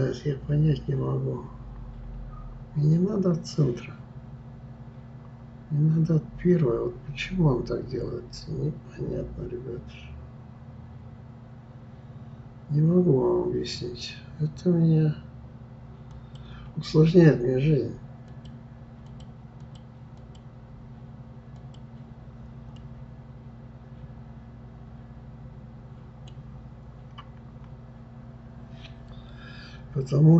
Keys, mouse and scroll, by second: 18.3-22.3 drag, 22.7-25.7 middle drag.